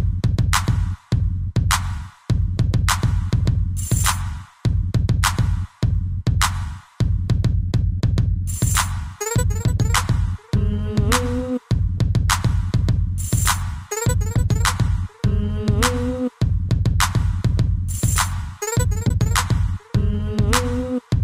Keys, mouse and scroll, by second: 1.1 shift+click, 1.2 shift+click, 3.2-3.6 typing, 3.9 click, 3.9 click, 4.8 b, 6.0 b, 7.7 click, 8.7 b, 8.9 middle click, 10.0 b, 10.4 middle click, 11.3 middle click, 12.3 Right, 12.6 Right, 12.8 Right, 15.2 shift+middle click, 15.8 middle click, 17.4 middle click, 17.8 middle click, 18.6 middle click, 19.7 click.